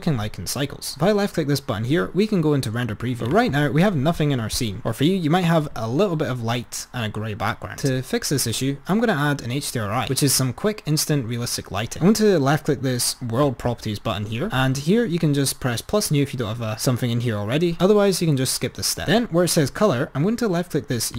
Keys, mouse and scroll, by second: 13.4 click.